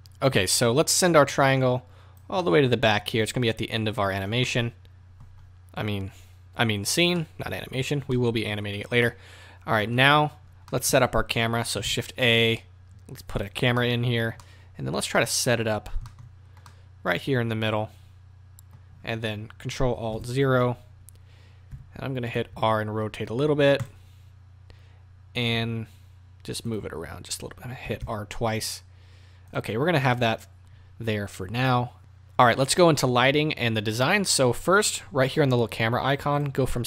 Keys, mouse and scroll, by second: 1.3-2.4 drag, 2.4-22.3 middle drag, 20.1 ctrl+alt+KP_0, 21.7 r, 22.3 right click, 22.5-26.6 middle drag, 22.5 r, 25.5 g, 29.5 r, 30.0 click, 36.3-36.8 drag.